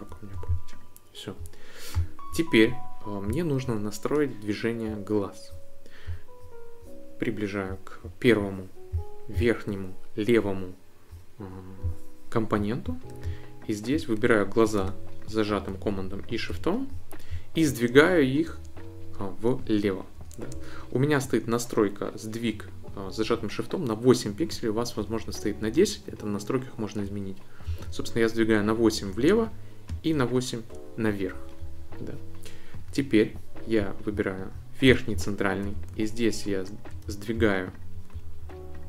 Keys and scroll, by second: 27.6 shift+Left, 29.9 shift+Up.